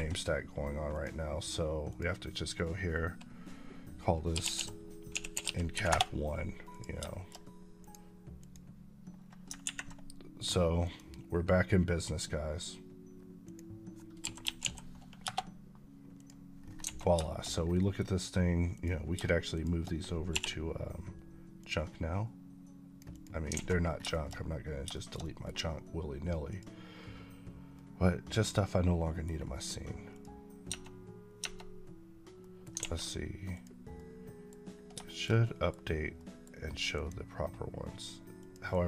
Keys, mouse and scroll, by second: 0.8 click, 4.2-5.3 typing, 5.8 Return, 6.6 click, 7.0 shift+middle click, 7.7 click, 9.3 click, 10.7 click, 13.3 click, 14.5 End, 16.0 click, 16.5 scroll down 1, 16.7 alt+a, 17.1 shift+middle click, 17.4 scroll down 1, 17.7 middle click, 18.6 click, 19.4 shift+click, 20.2 m, 21.5 click, 23.0 double click, 23.4 alt+a, 23.7 scroll down 1, 24.0 shift+middle click, 24.2 scroll up 2, 24.8 shift+middle click, 25.1 middle click, 26.4 click, 27.6-29.2 middle drag, 30.0 click, 30.5 Tab, 32.3 middle click, 32.9 a, 33.4 click, 33.8 middle click, 34.4-34.8 scroll up 1, 34.9 shift+middle click, 35.8 scroll down 1, 36.0 middle click, 37.7 click.